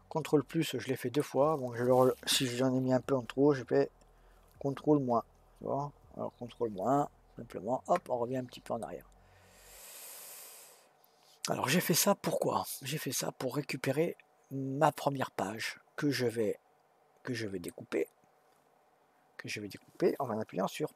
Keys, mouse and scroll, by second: 7.3 ctrl+KP_Subtract, 8.8-11.8 middle drag.